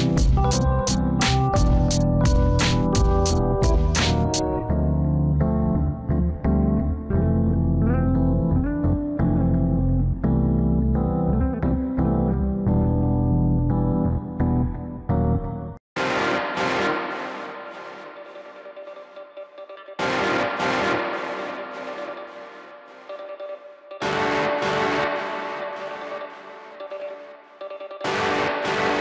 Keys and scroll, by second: 13.4 ctrl+z, 22.4 alt+w.